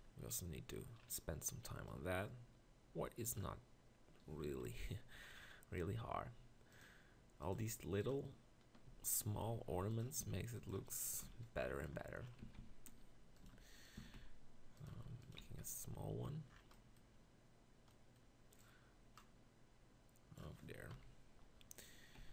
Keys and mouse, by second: 4.7 ctrl+KP_Decimal, 8.9 z, 9.5 g, 10.2 s, 11.2 ctrl+KP_Decimal, 12.5-15.4 typing, 20.5 right click, 20.9 KP_1, 22.2 z.